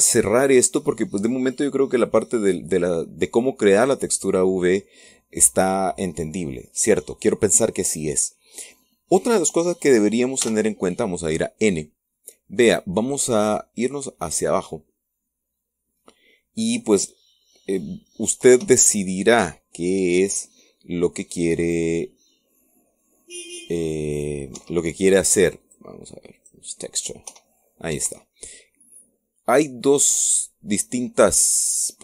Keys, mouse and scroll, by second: 2.3 click, 3.6 scroll down 2, 4.1-11.2 middle drag, 11.2 n, 14.2-14.5 scroll down 2, 15.0-15.8 scroll down 4, 16.2-16.6 scroll down 1, 19.3 p, 25.3 Escape, 26.4 click, 27.2 click, 28.1 p, 28.8 Escape.